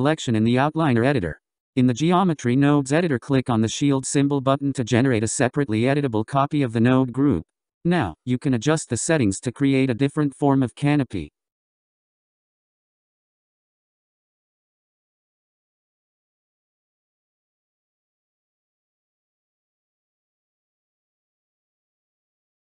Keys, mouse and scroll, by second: 3.6-5.6 drag, 7.1 click, 8.1 click, 9.0-10.8 scroll down 12, 10.8-13.6 scroll up 12, 13.6-17.9 drag, 22.3 click.